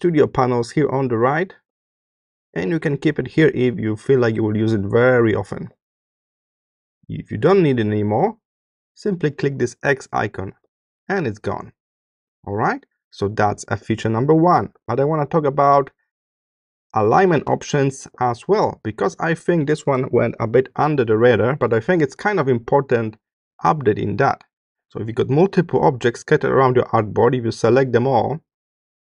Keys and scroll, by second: 14.5 space.